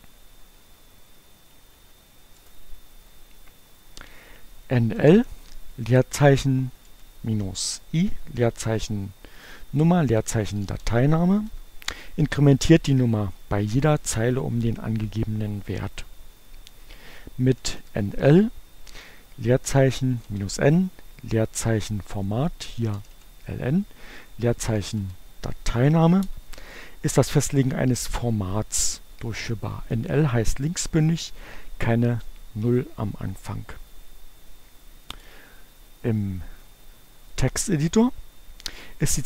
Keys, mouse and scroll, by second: 1.6 space, 2.0 shift+2, 2.5 shift+Return, 4.8-11.3 typing, 11.6 Return, 17.4 n, 17.9 l, 19.5 space, 19.6 -, 20.4 n, 20.7 space, 22.8-25.6 typing, 25.8 Return, 35.2 click, 37.4 click.